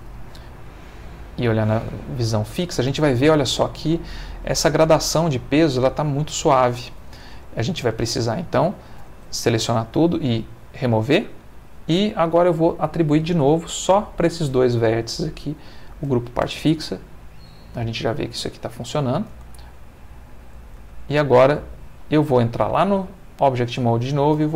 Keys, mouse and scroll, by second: 1.4 click, 7.3 Tab, 9.1 a, 10.6 click, 12.7 click, 13.8 shift+click, 15.4 click, 16.4 Tab, 18.2 Tab, 19.3 space, 20.8 Tab, 21.9 Escape, 22.8 ctrl+Tab, 23.7 click, 24.3 space.